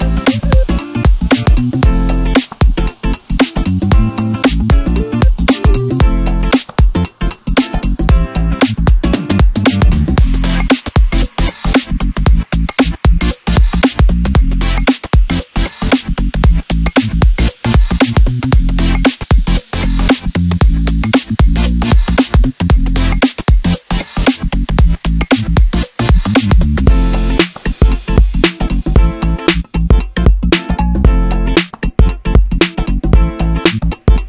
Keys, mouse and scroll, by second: 0.3-2.7 middle drag, 2.7 KP_1, 3.8 s, 6.7-9.1 middle drag, 9.1-11.0 drag, 11.7 click, 13.0 p, 15.0-16.4 drag, 16.9 click, 18.0-19.1 drag, 19.1-20.0 scroll up 1, 20.0 click, 20.8-23.1 middle drag, 23.1 e, 24.2 s, 28.6-31.6 middle drag, 32.8 e, 33.6 s.